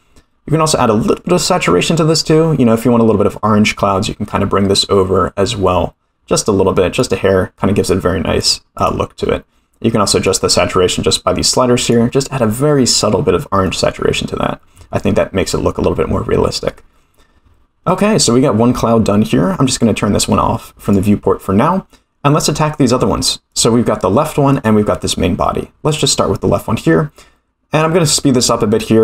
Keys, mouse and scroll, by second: 8.3 click, 8.7-10.4 drag, 13.6-13.9 middle drag, 14.1-14.8 scroll down 2, 14.8 scroll down 1, 15.6-16.6 scroll down 4, 16.6-17.0 middle drag, 20.8 click, 23.5 click, 24.5 click, 25.8 click, 28.3-29.0 drag.